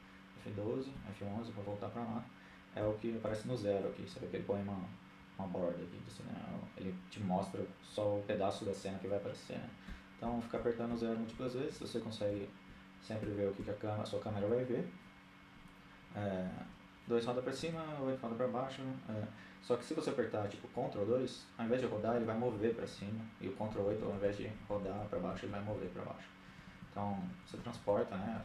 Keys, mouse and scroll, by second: 0.0 F11, 1.8 KP_0, 2.3 KP_0, 8.9-13.4 typing, 15.4 KP_2, 15.7 KP_2, 16.6 KP_8, 16.8 KP_8, 20.7 ctrl+KP_2, 20.9-21.6 ctrl+KP_2, 21.8 ctrl+KP_2, 22.0 ctrl+KP_2, 22.7-24.5 ctrl+KP_8, 25.0 ctrl+KP_8, 25.7-26.6 ctrl+KP_2, 26.8 ctrl+KP_2, 27.0 ctrl+KP_2, 27.3-27.7 ctrl+KP_8.